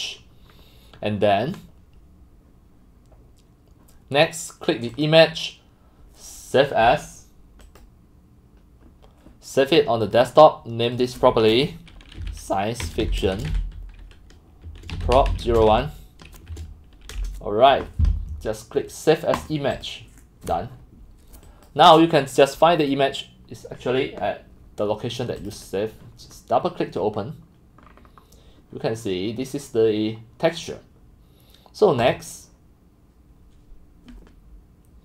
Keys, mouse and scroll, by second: 0.2 scroll, 0.5 click, 3.0-5.1 middle drag, 5.1-6.0 drag, 7.6 click, 10.0 click, 11.0 click, 12.2-17.1 typing, 17.9 right click, 19.4 click, 21.7 click, 25.7 click, 26.6-27.1 drag, 27.1-27.8 scroll up 5, 27.8 scroll down 5, 28.1-32.0 scroll up 2, 32.0 scroll up 1, 32.1 click, 32.9 click, 33.9 click, 34.4 click.